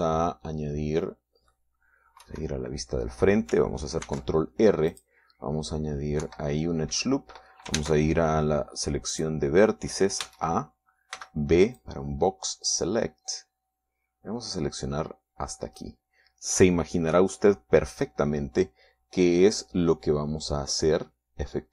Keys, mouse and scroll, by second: 3.7 KP_1, 5.5 ctrl+r, 6.3 click, 7.7 Escape, 9.2 ctrl+Tab, 10.6 click, 11.7 a, 12.6 b, 13.2-17.5 drag, 18.6-21.7 middle drag.